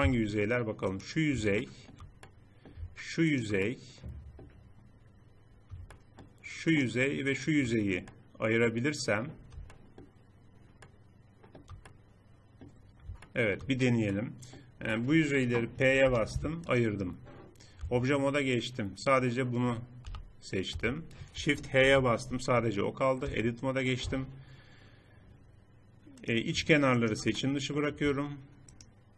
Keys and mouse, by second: 1.4 middle click, 2.3-3.6 middle drag, 3.6-5.1 drag, 5.1 middle click, 6.4-7.4 drag, 7.5 middle click, 8.4 middle click, 8.6-9.7 middle drag, 12.6 middle click, 14.0 middle click, 15.8 p, 17.6 Tab, 19.8 g, 21.6 shift+h, 23.0 Tab, 23.8 a, 26.0 click, 27.2 middle click.